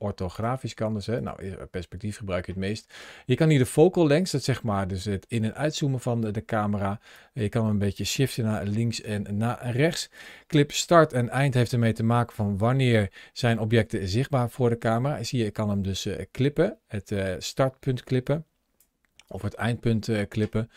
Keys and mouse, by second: 0.1 click, 3.2-6.0 drag, 6.9 click, 8.3 ctrl+z, 10.7-18.6 drag, 19.1-20.7 drag.